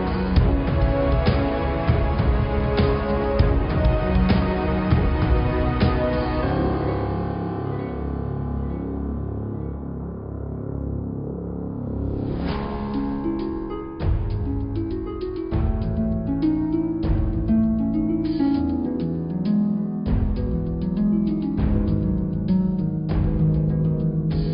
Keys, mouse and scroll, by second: 0.0 shift+a, 5.7 s, 11.6 Tab, 12.0-12.5 scroll up 2, 12.5 click, 13.9 s, 15.4 Tab, 15.4 click, 15.9-16.3 scroll down 3, 16.3-18.5 middle drag, 18.8 shift+a, 21.3 click, 22.2 s.